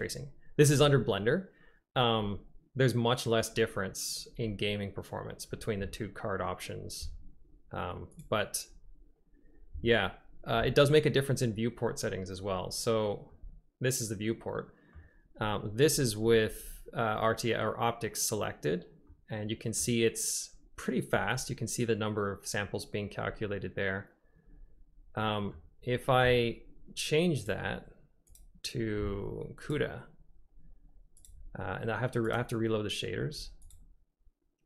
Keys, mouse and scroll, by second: 13.3 click, 13.5-15.0 middle drag, 19.1 middle click, 19.4-19.9 drag, 25.3 middle click, 27.5-29.0 drag, 32.4 click, 34.1 click.